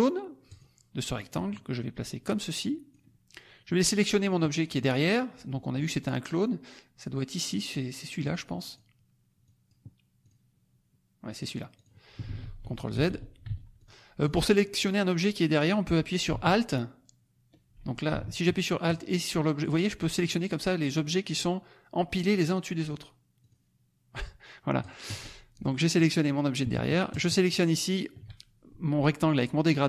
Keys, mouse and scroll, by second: 0.4 click, 1.1-3.0 drag, 8.2 click, 8.6 click, 9.4 click, 10.2 click, 11.4 click, 11.8 click, 12.4 ctrl+z, 13.8 ctrl+drag, 14.2 ctrl+click, 18.9 alt+click, 20.1 alt+click, 21.3 alt+click, 22.9 alt+click, 24.8 alt+click, 27.2 shift+click.